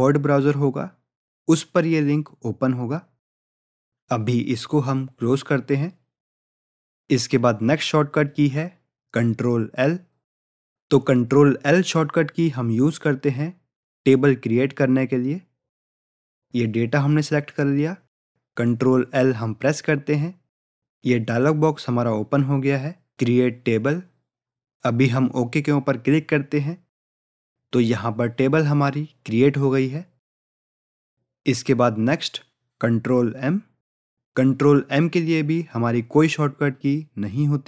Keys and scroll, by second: 19.7 ctrl+l.